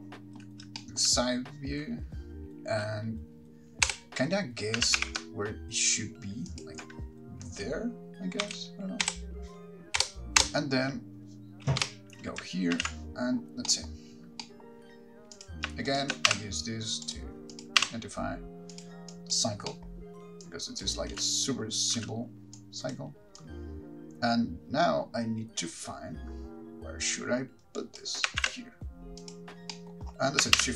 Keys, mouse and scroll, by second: 0.0 shift+middle click, 1.0 shift+middle click, 4.1 Right, 5.1 g, 6.8 ctrl+click, 8.6 Left, 9.2 Right, 10.2 Right, 10.6 Right, 12.0 Left, 13.0 alt+g, 15.5 middle click, 15.5 click, 15.5-16.1 scroll up 8, 16.1 shift+click, 17.4 r, 17.7 click, 19.0 r, 19.3 click, 20.6 click, 20.6 middle click, 20.6-21.0 scroll down 5, 21.3 space, 22.2 space, 22.8 click, 23.6 click, 28.6 shift+d, 29.5 click.